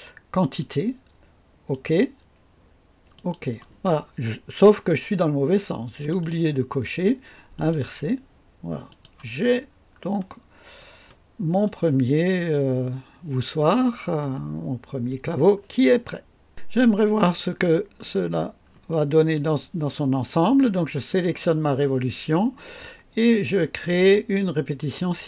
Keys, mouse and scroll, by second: 0.3 click, 1.7 click, 3.1 click, 4.2 scroll up 1, 6.0 click, 7.5 click, 8.8 click, 9.5 scroll down 1, 10.1 right click, 11.0 right click, 14.7 scroll down 1, 15.4 scroll up 1, 16.8 scroll up 1, 17.3-18.2 right drag, 18.3 scroll down 1, 18.9-19.5 right drag, 21.1 click, 25.0 click.